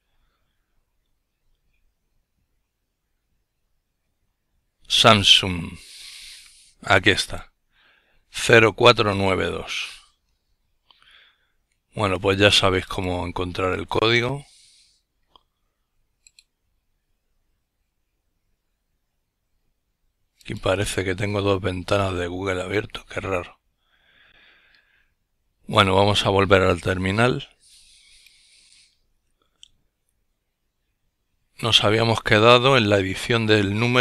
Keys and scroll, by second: 23.2 F12.